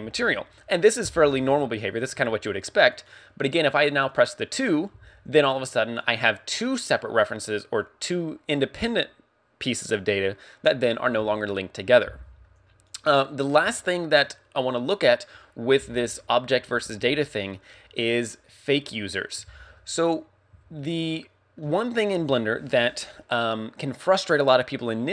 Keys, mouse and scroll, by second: 3.0 right click, 4.4 click, 6.0 click, 13.4 scroll up 3, 13.9 shift+middle click, 14.6 scroll down 1, 20.1-20.7 scroll down 1, 20.8 shift+middle click.